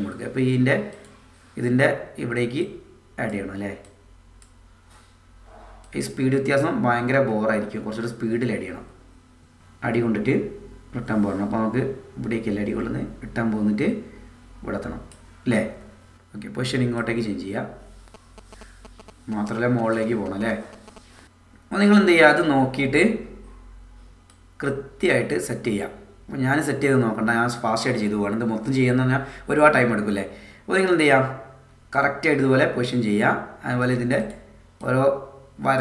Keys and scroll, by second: 6.3 space.